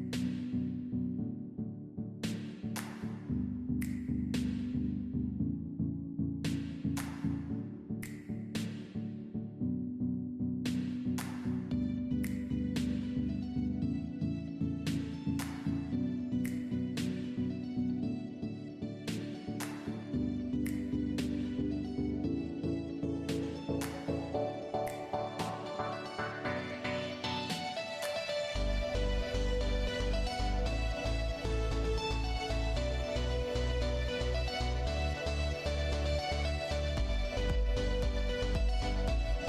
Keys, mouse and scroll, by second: 0.6 shift+middle click, 3.6 click, 4.9 g, 9.3 i, 13.2 click, 16.0 g, 21.0 g, 27.0 i, 28.1 i, 30.2 i, 32.5 click, 34.7 click, 36.4 i, 38.5 click.